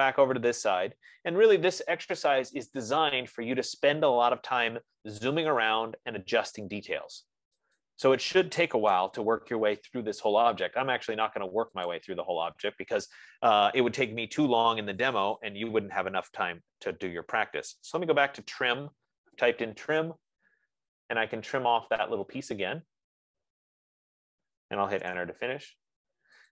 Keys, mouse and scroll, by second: 0.4-1.6 scroll, 3.8 click, 6.0 click, 8.2 click, 9.3 Return, 12.3 click, 16.7 click, 17.9-19.1 typing, 22.0 click, 25.2 Return.